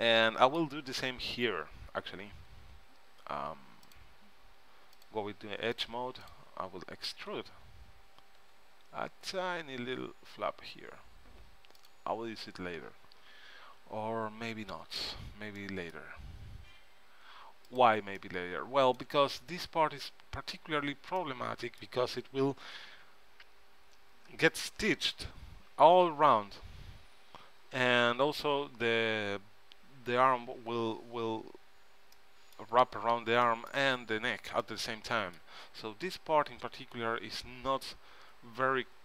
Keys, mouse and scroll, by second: 0.4 middle click, 4.0-7.4 drag, 7.4 e, 8.1 click, 14.6 ctrl+z, 15.1 ctrl+z, 17.9-19.6 drag, 18.4 right click, 18.5 middle click, 19.6 middle click, 21.9-23.2 middle drag, 32.3-38.2 middle drag.